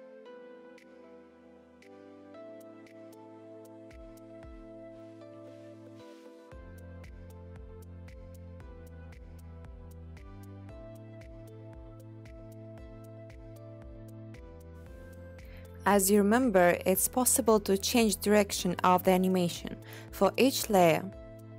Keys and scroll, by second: 9.0 space, 9.5 0, 18.3-19.1 typing, 20.8-21.5 typing.